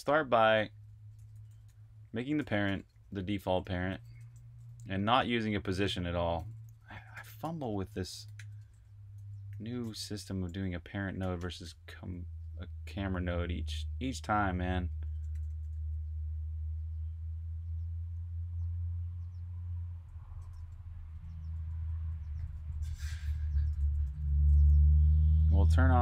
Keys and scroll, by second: 0.0-15.6 typing, 19.5-24.1 typing.